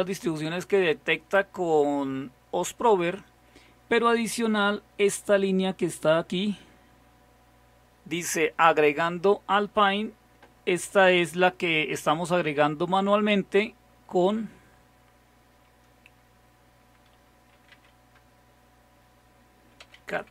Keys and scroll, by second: 17.3-18.3 typing, 19.6-20.3 typing.